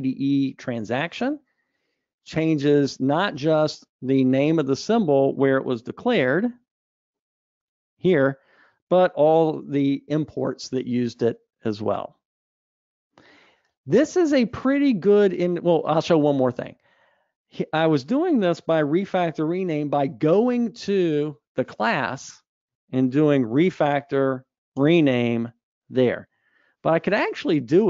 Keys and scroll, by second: 6.5 super+b, 20.7 super+b, 25.3 shift+F6, 27.0 alt+super+[.